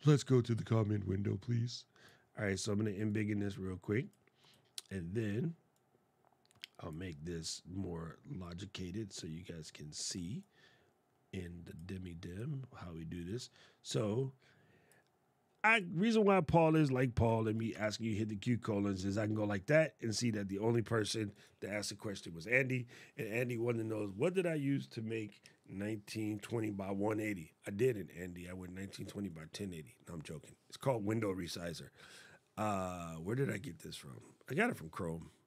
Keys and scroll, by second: 17.1 shift+;.